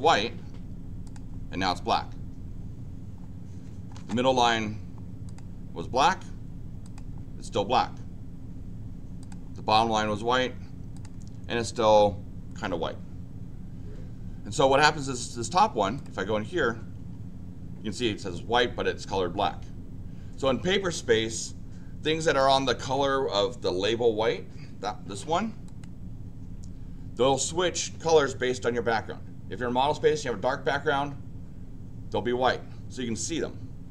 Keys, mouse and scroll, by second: 1.0 click, 5.2 click, 6.8 click, 9.2 click, 10.9 click, 15.9 click, 25.6 click.